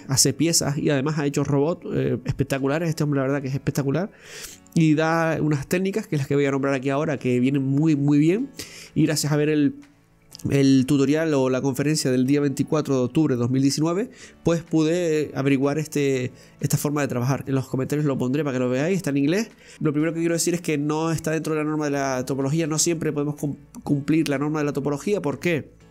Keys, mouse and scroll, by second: 17.4 scroll down 2, 17.5-17.9 scroll up 2, 17.9-18.3 scroll down 1, 18.3-19.9 middle drag, 19.9 scroll up 2, 20.5-22.0 scroll down 1.